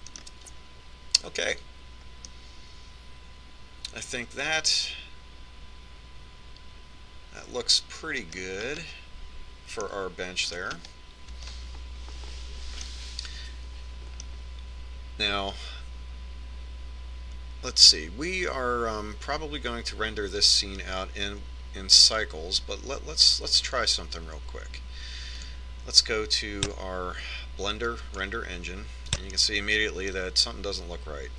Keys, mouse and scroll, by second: 3.3-5.0 middle drag, 9.8-13.8 middle drag, 13.9-15.8 middle drag, 26.5-28.3 drag, 30.5-31.3 middle drag.